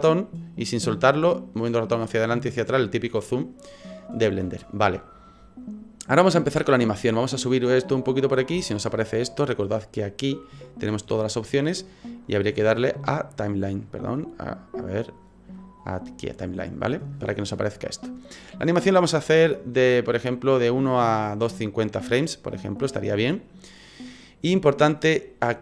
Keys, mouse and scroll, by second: 0.0 ctrl+middle click, 7.4 click.